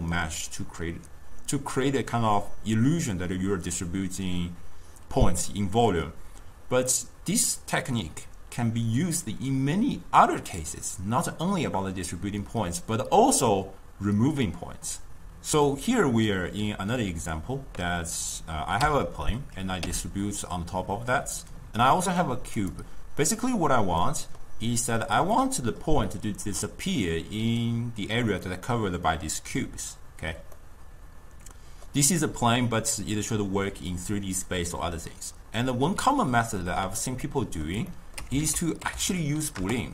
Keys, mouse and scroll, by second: 18.2 click, 18.9 m, 19.9 m, 22.1 click, 22.6 click, 23.2-26.5 middle drag, 26.5 d, 27.0 d, 27.0 d, 27.2-29.6 drag, 29.6-30.2 d, 30.6-33.7 middle drag, 37.3-38.4 middle drag, 38.4 ctrl+a, 39.1 o.